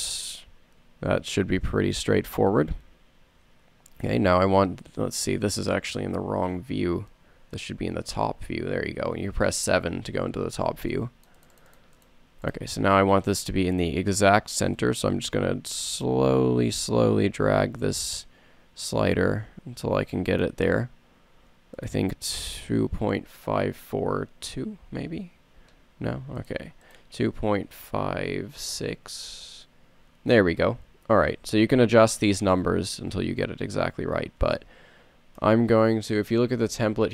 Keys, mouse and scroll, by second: 6.2 KP_7, 8.2 KP_7, 27.1 BackSpace, 28.6 BackSpace, 34.0-35.9 middle drag, 35.8 KP_7, 35.9 KP_7, 36.4 middle click.